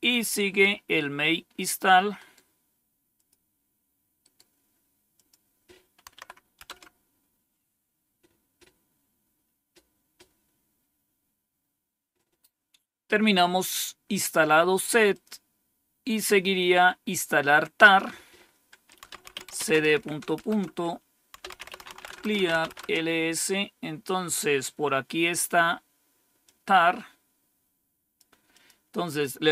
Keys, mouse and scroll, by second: 2.1 right click, 3.0 click, 4.1 right click, 4.8 right click, 5.0 click, 6.0 Tab, 6.5 Return, 15.0 click, 17.7 click, 18.7-22.8 typing, 26.3-28.1 drag.